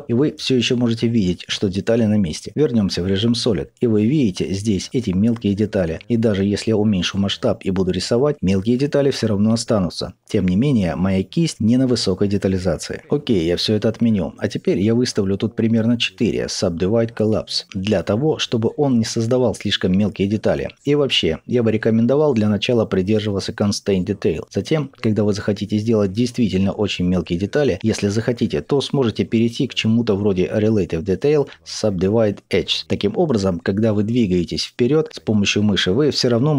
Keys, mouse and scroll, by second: 0.0-0.6 scroll up 2, 2.6-7.3 middle drag, 2.6 z, 3.5-4.1 scroll up 2, 6.2-7.3 scroll down 2, 7.3-36.5 drag, 13.4 ctrl+z, 33.0 scroll up 2, 34.3-35.0 scroll up 1.